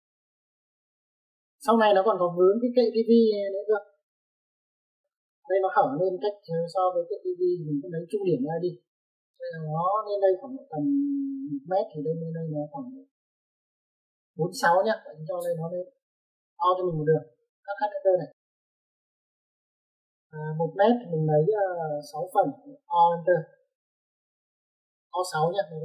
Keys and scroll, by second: 16.9 Escape, 17.2 Escape, 18.4 h, 18.5 h, 19.0 space, 20.3 space, 23.9 typing.